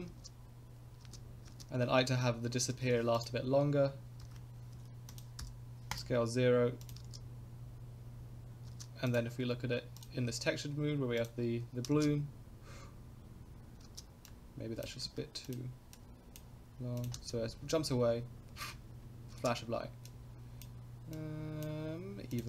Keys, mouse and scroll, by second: 0.1 space, 1.0 space, 1.5 space, 2.7 i, 4.2 s, 5.4 i, 6.8 click, 7.0 space, 8.7 space, 9.1 click, 10.1 click, 11.2 click, 12.8 space, 13.9 space, 14.2-14.9 drag, 15.0 ctrl+z, 15.4 click, 15.9-16.4 drag, 17.0 click, 17.1 space, 19.4 space, 20.0 click, 21.1 click, 22.3 click.